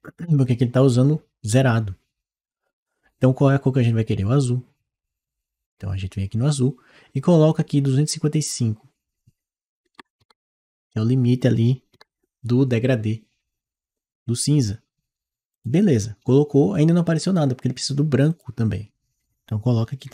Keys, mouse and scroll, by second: 7.2 click, 15.4 click, 18.1 click, 19.9 5.